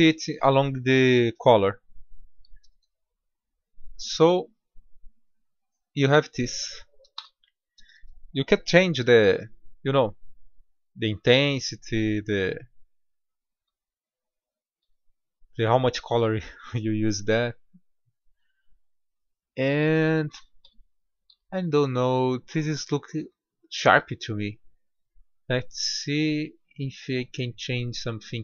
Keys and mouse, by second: 1.8-2.5 middle drag, 2.6 Tab, 7.2 Tab, 9.1 s, 14.1-15.3 middle drag, 15.1 Tab, 19.5-21.3 middle drag, 20.7 Tab, 21.8 Tab, 21.8 middle drag, 24.9-28.4 drag.